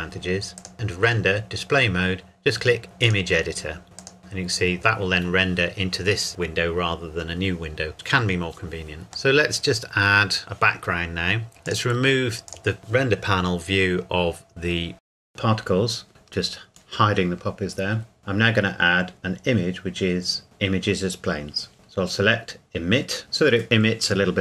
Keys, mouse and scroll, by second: 0.6 click, 3.0 click, 4.8 click, 9.3 middle click, 11.6 click, 14.5-14.9 scroll down 1, 14.9 middle click, 16.1 click, 17.0-17.5 scroll up 1, 18.0 click, 20.8 click, 23.2 click.